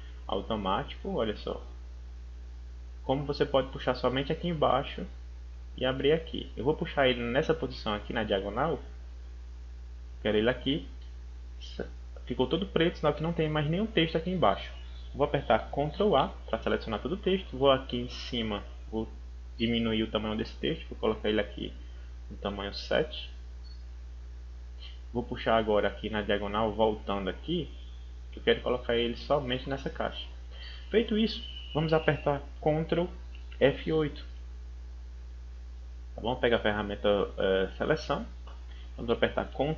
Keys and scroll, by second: 15.9 ctrl+a, 34.0 ctrl+F8.